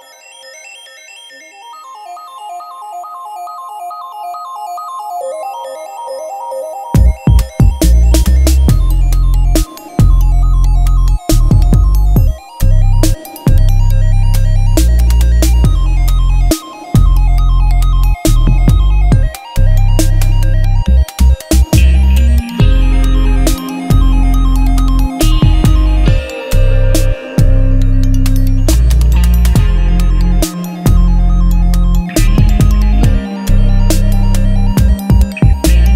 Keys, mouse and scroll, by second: 5.7 click, 9.2-11.4 typing, 12.6 BackSpace, 15.0-15.4 typing, 17.0 click, 20.5 click, 24.0 c, 30.0-30.5 typing, 32.8 click.